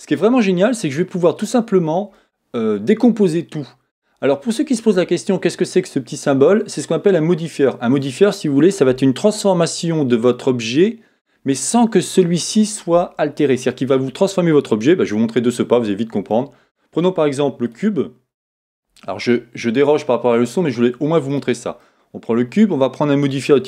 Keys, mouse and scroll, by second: 16.6 middle click, 17.7 click, 21.8 middle click, 21.9 middle click.